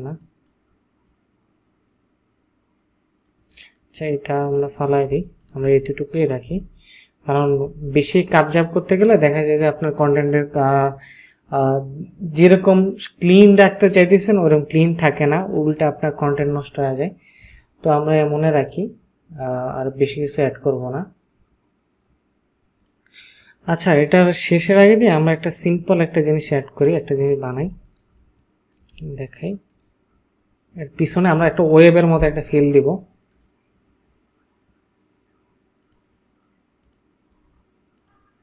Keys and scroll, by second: 5.1 ctrl+space, 6.7 ctrl+space, 27.7 ctrl+space.